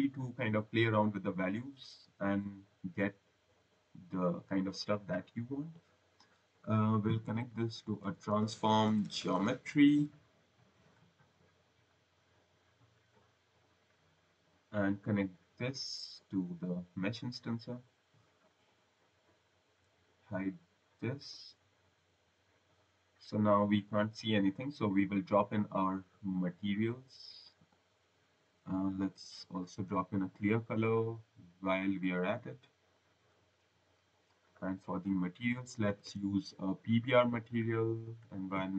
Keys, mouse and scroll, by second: 0.2 click, 1.4 click, 4.8 click, 5.5 click, 7.2-9.3 typing, 10.7 click, 11.8 click, 13.3 scroll, 15.2 click, 18.5 click, 19.1 scroll, 21.0 click, 21.7 click, 22.0 scroll, 22.2 click, 25.7 click, 27.5 click, 28.6-30.2 typing, 30.7 click, 32.8 click, 34.3 click, 35.6-37.3 typing, 37.4 click, 38.0 click.